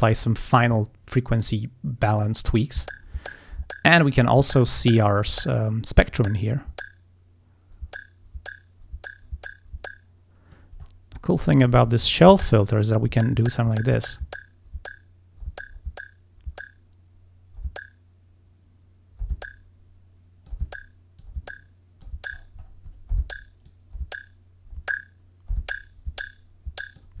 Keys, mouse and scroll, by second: 6.4-10.8 drag, 10.9-12.4 scroll up 6, 12.5-13.9 drag, 19.4-20.7 drag, 21.3-22.3 drag, 22.4 scroll up 1, 23.7-27.2 drag.